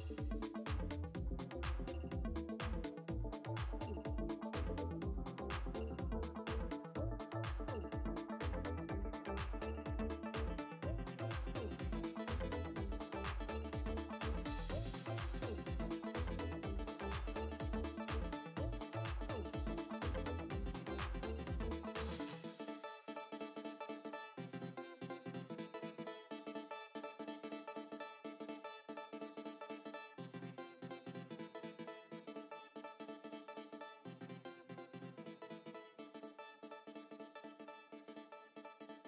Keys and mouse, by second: 24.7 click, 27.1 space, 29.1 ctrl+z, 30.8 click.